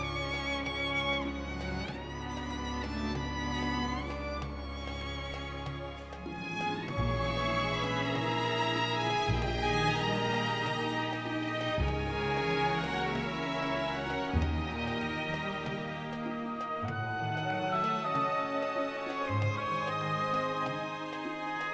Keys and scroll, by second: 5.7 Tab, 6.7 ctrl+a, 7.1-11.2 typing, 12.1 Tab, 19.0 d, 19.3 u, 19.9 s.